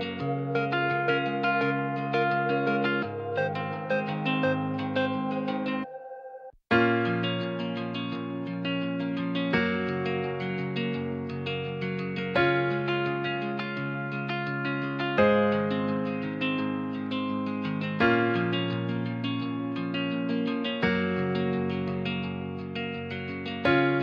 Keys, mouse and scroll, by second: 0.2 shift+middle click, 1.1 f, 2.4 ctrl+z, 3.0 g, 3.2 z, 4.8 shift+d, 5.6 g, 6.0 z, 9.6-10.7 drag, 10.7 g, 10.8 z, 11.5 click, 11.9 Tab, 12.3 Tab, 12.6 ctrl+r, 16.9 click, 17.2 Tab, 17.8 middle click, 18.4 Tab, 18.7 click, 18.9 c, 19.3 alt+middle click, 20.2 shift+middle click, 20.8 s, 21.6 z, 22.0 click, 23.0 g, 23.0 z.